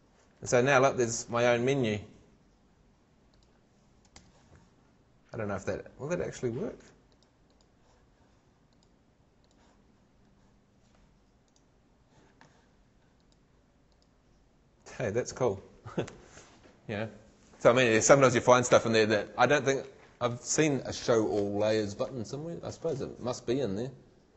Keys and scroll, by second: 4.2 shift+super+l.